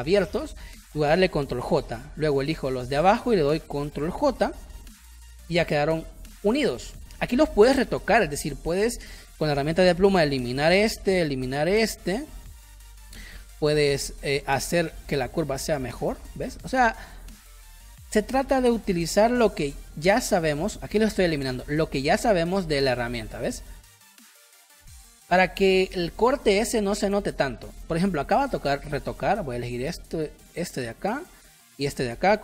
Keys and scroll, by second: 1.6 ctrl+j, 4.0 ctrl+j, 5.0 ctrl+y, 6.3 space, 8.8 p, 13.0 space, 25.9 space, 29.2 a.